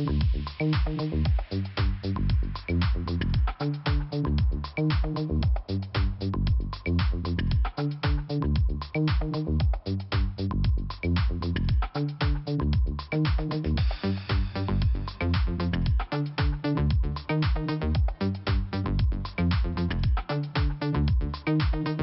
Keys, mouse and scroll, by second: 0.8-1.4 scroll down 2, 2.8 click, 7.2 click, 8.3 click, 9.2 click, 9.3 click, 9.8 click, 11.4 click, 13.4 click, 13.4 click, 14.1 click, 16.6 click, 16.6 double click, 17.3 double click, 18.2 click, 20.1 click.